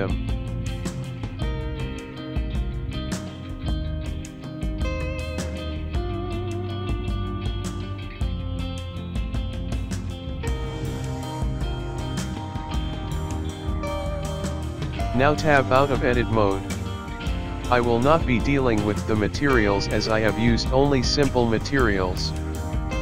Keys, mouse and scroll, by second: 0.1 ctrl+z, 0.3 ctrl+z, 0.9 click, 2.6 s, 3.1 g, 3.9 click, 4.5 s, 5.6 s, 8.3 click, 9.0 g, 13.1 click, 13.9 middle click, 13.9-14.2 scroll down 6, 14.2 click, 14.2 KP_0, 14.4 scroll down 1, 14.6 scroll up 1, 15.4 click, 18.8 scroll down 1, 20.2-22.3 scroll down 3, 22.7 middle click.